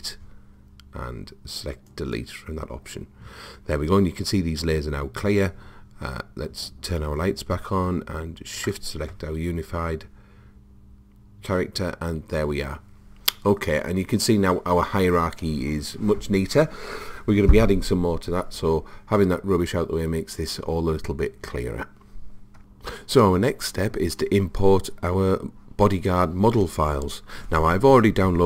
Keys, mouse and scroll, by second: 6.9-10.6 drag.